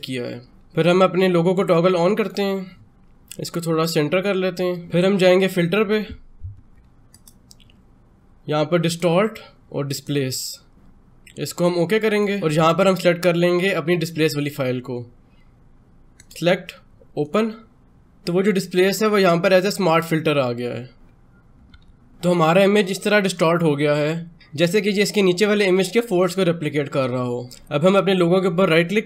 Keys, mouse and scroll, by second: 2.0-4.7 drag.